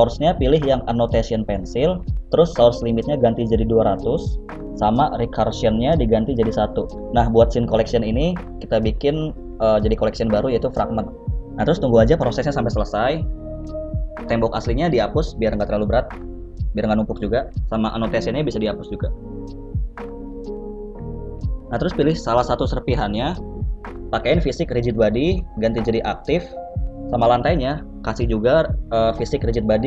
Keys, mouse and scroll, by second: 2.3 KP_0, 14.5 right click, 15.1 scroll down 1, 15.2 middle click, 15.5 x, 16.1 middle click, 17.6 n, 19.1 click, 20.3 click, 20.6 click, 21.1 click, 21.5 n, 21.8 middle click, 22.7 right click, 22.9 middle click, 24.4 click, 25.6-26.4 scroll down 1, 26.4 click, 26.4-26.9 scroll down 2, 28.3 right click, 29.0 click.